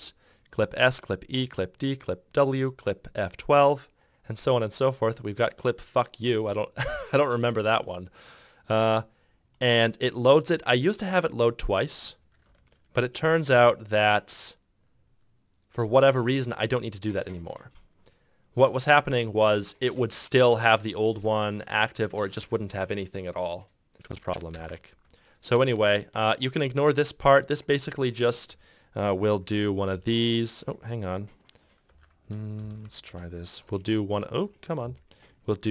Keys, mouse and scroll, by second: 12.6 ctrl+q, 24.5 ctrl+z, 30.1 shift+0, 33.8 shift+Return.